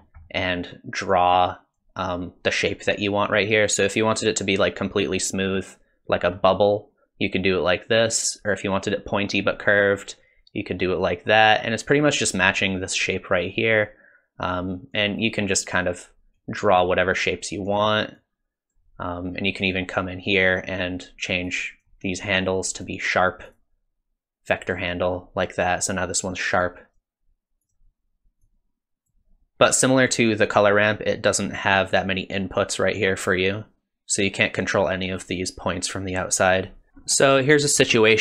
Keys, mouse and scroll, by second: 0.0 alt+click, 0.0 scroll up 2, 0.3 middle click, 1.1 click, 3.6 click, 6.4 scroll down 1, 8.0 click, 13.9 click, 15.4 click, 16.4 click, 17.3 click, 18.2 click, 19.6 click, 21.5 click, 22.8 click, 23.5 click, 26.6 click, 26.9 click, 28.5 click, 30.3 click, 36.9 shift+middle click, 36.9-37.4 scroll up 5, 37.3 middle click.